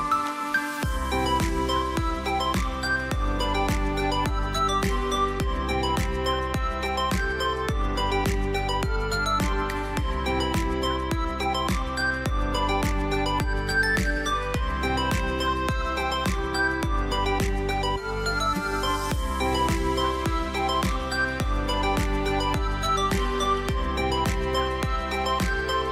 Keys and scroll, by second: 3.6 x, 5.3 g, 8.3 v, 10.1 space, 11.5 ctrl+c, 12.5 ctrl+f, 22.9 ctrl+x, 24.2 ctrl+b.